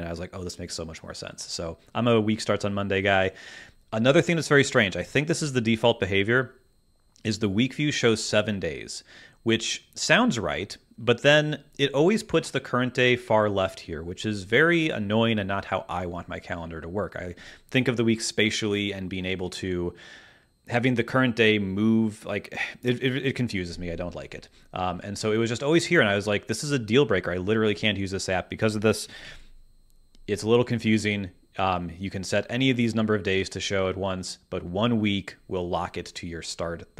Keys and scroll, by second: 29.2 super+,.